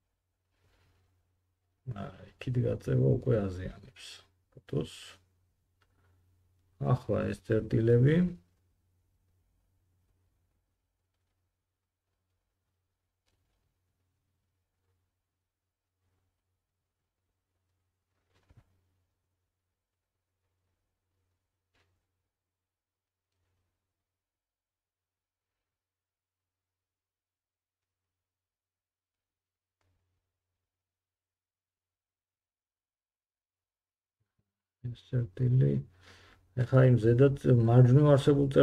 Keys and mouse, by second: 1.0 g, 5.2-8.7 drag, 8.7 g, 11.8 middle click, 12.1 g, 14.6-23.7 drag, 14.7 g, 17.4 g, 23.7 middle click, 23.8-27.8 drag, 24.2 g, 27.8 middle click, 27.9-29.5 drag, 28.0 g, 29.5 middle click, 29.6-32.5 drag, 29.7 g, 32.5 middle click, 32.6-38.6 drag, 36.2 g.